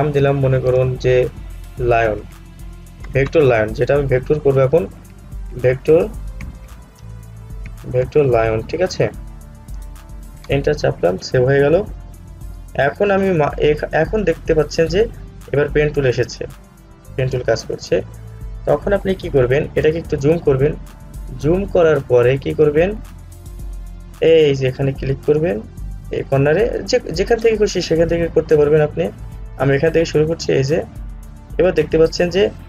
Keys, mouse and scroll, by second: 2.2 typing, 4.4-5.1 typing, 7.2-7.8 typing, 10.2-10.9 typing, 19.9 alt+Return, 20.0 alt+scroll up 1, 22.3-24.5 scroll up 1, 30.5 click.